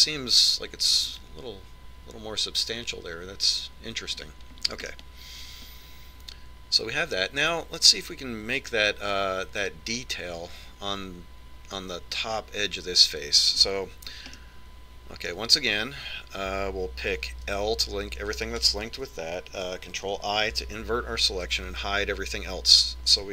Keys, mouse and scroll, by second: 6.1-7.8 middle drag, 15.6-17.4 middle drag, 18.6 l, 21.2 ctrl+i, 22.8 h.